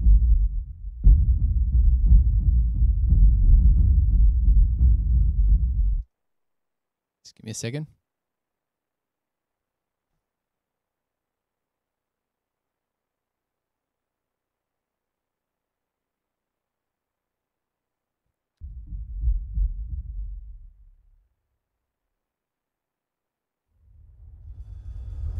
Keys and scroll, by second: 6.1 space, 18.7 space.